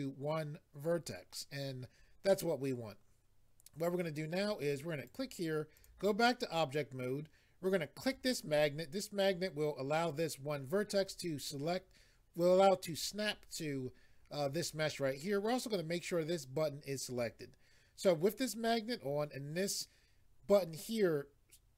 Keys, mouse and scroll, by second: 5.1 click, 5.7 click, 8.0 click.